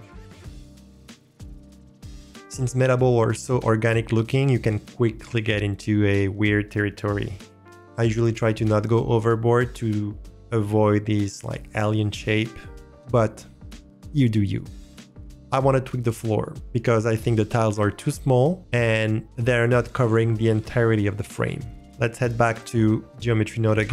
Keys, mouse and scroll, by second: 0.0-1.5 typing, 0.4 drag, 0.4 middle click, 0.7 click, 0.7 middle click, 1.2 alt+drag, 1.2 middle click, 1.4 middle click, 1.9 middle click, 2.0 click, 21.8 middle click, 23.1-23.9 drag.